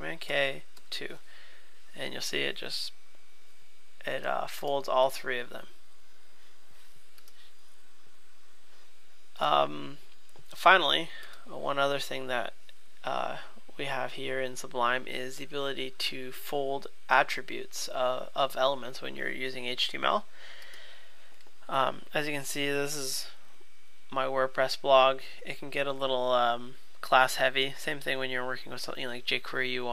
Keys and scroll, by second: 0.3 super+k, 0.8 super+2.